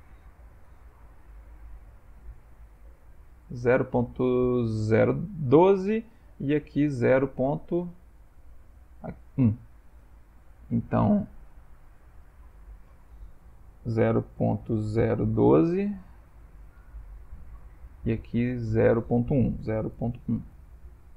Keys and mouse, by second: 11.7 click, 12.7 click, 18.3 click, 18.6 click.